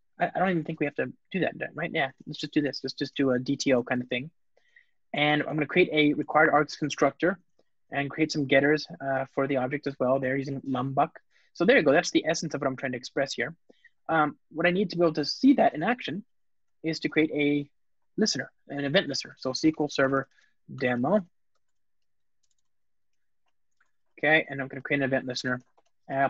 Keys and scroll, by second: 2.6 alt+shift+Left, 2.9 super+c, 3.7 super+v, 6.1 super+v, 6.2 Return, 8.2 Return, 9.5 alt+shift+Down, 10.0 alt+shift+Up, 11.1 alt+super+l, 11.8 super+BackSpace, 16.8 Return, 25.3 Return.